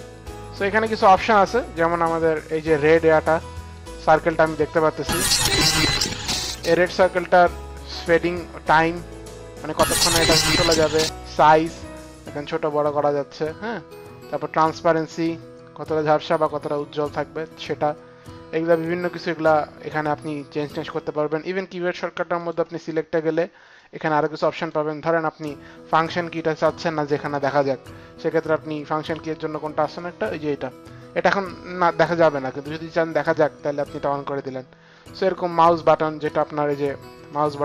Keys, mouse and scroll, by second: 2.0 click, 2.6 click, 3.7 click, 7.5 click, 11.4 click, 14.6 click, 22.3 click, 23.8 click, 33.1 click, 36.2 click.